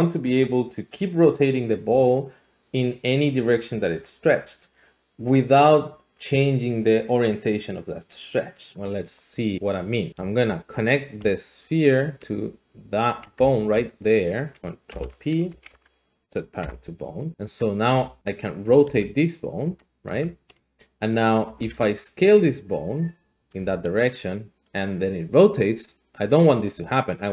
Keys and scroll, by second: 10.1 Tab, 13.4 Tab, 14.9 ctrl+p, 15.5 Up, 15.7 Up, 16.6 Return, 17.9 r, 18.2 Escape, 18.8 r, 20.1 Escape, 21.4 s, 21.7 z, 23.6 r.